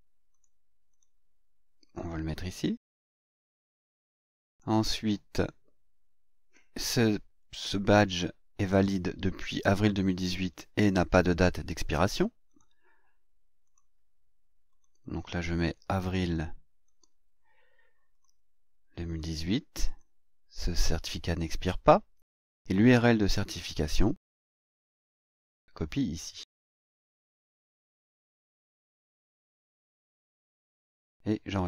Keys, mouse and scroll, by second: 0.3 click, 0.9 click, 2.5 click, 3.3 ctrl+v, 4.5 click, 5.3 click, 12.5 click, 13.6 click, 14.7 click, 16.8 click, 18.1 click, 19.1 click, 19.8 click, 23.1 click, 24.1 click, 25.7 click, 27.2 click, 27.9 click, 28.9 ctrl+click, 29.3 ctrl+v, 30.3 click.